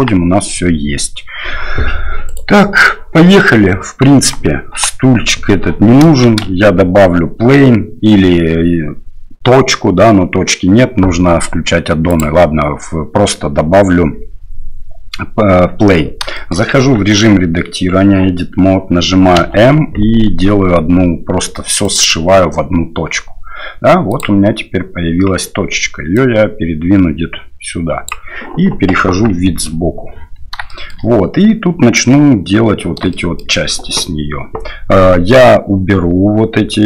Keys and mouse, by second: 2.3 right click, 4.7 Delete, 6.2 shift+a, 16.3 shift+middle click, 16.8 Tab, 19.3 m, 24.2 click, 26.1-28.1 drag, 29.0 KP_3, 30.7 shift+middle click, 33.1 shift+middle click.